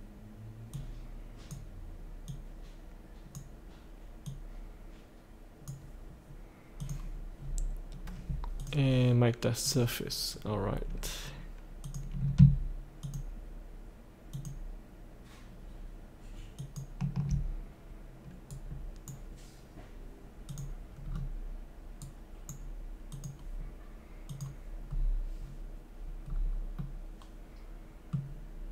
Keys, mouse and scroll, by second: 7.2 click, 7.4-7.8 scroll up 1, 8.5 click, 10.3 scroll down 1, 11.8 click, 13.0 ctrl+click, 14.3 ctrl+click, 16.5 ctrl+click, 18.4 right click, 20.4 click, 21.1-21.4 scroll down 1, 22.0 right click, 23.1 click, 24.8-25.3 scroll up 1, 26.8-28.4 middle drag.